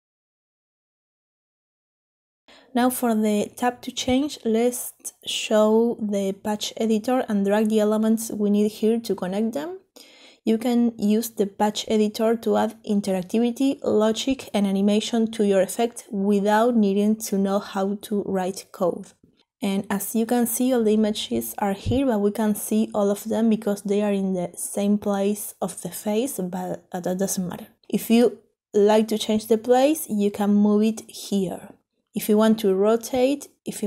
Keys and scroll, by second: 22.7 ctrl+z, 29.0 ctrl+z, 32.8 ctrl+z.